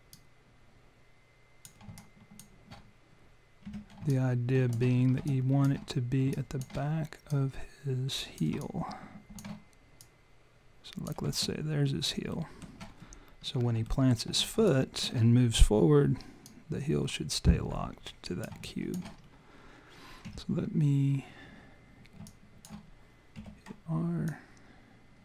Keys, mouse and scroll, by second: 0.1 click, 2.0 alt+click, 3.7 w, 4.1 alt+click, 5.0-5.7 scroll up 3, 5.3 alt+click, 6.3 alt+click, 7.3 click, 8.6 alt+click, 10.0 click, 11.3 alt+click, 12.4 alt+middle click, 13.4-13.7 scroll up 1, 13.9 alt+middle click, 14.6 alt+click, 16.5 click, 18.7 alt+click, 19.2 scroll up 2, 20.3 e, 22.3 alt+click, 23.4 r, 24.3 click.